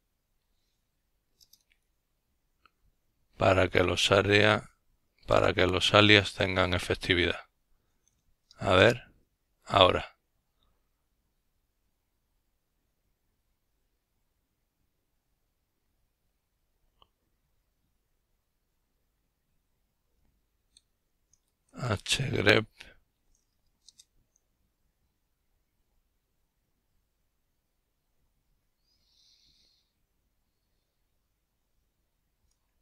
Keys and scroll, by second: 0.6-1.3 typing, 12.7-14.7 typing, 15.8 typing, 24.4-25.3 typing.